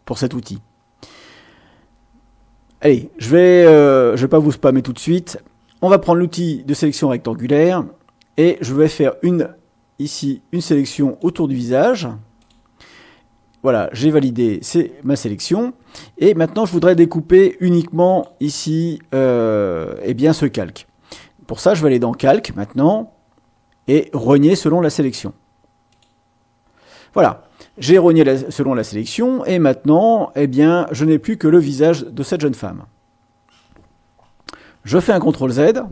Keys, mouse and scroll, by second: 6.7 click, 8.7-11.4 drag, 12.4 click, 18.0 click, 22.1 click, 25.9 click, 35.1 ctrl+z.